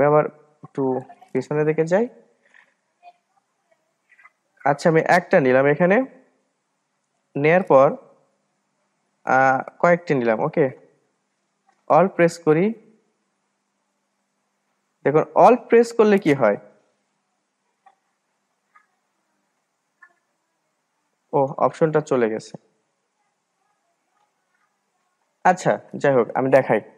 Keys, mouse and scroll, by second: 6.4-9.5 drag, 10.6-13.3 drag, 14.7 alt+click, 15.7 click, 16.3-16.7 scroll down 2, 16.7-18.7 middle drag, 18.7 ctrl+z, 20.8 scroll up 2, 23.3 ctrl+z, 23.6 ctrl+z, 23.8 ctrl+z.